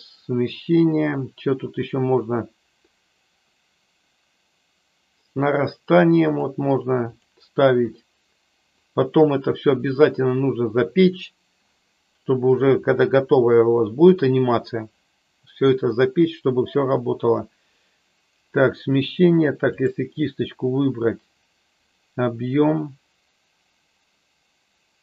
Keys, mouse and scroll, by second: 6.4 click, 7.1 click, 8.8 click, 19.7-20.1 drag, 21.9-25.0 drag.